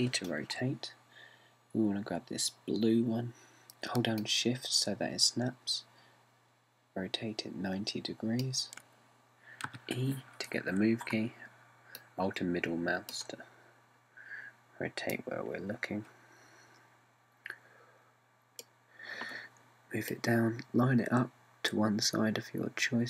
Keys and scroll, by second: 0.5 r, 10.7 e.